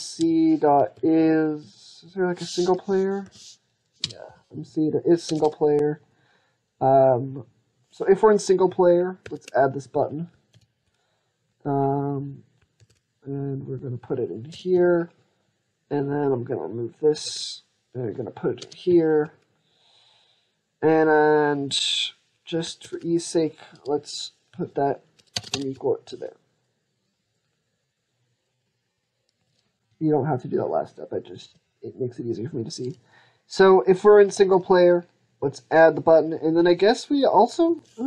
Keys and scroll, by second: 9.0 ctrl+x, 10.4 ctrl+v, 12.6 ctrl+x, 14.6 ctrl+v, 17.1 ctrl+x, 18.7 ctrl+v, 22.6 ctrl+x, 25.9 ctrl+v.